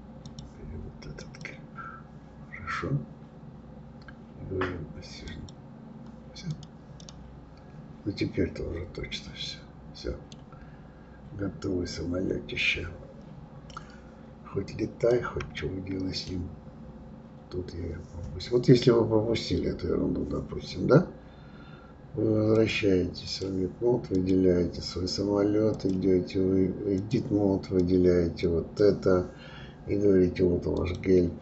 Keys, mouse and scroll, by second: 5.3 click, 6.5 click, 7.0-10.0 middle drag, 10.7-11.4 scroll up 1, 11.4-12.1 scroll up 1, 12.1-14.7 scroll down 1, 14.7 click, 15.6-18.6 middle drag, 22.5-24.3 drag, 25.7-30.9 drag.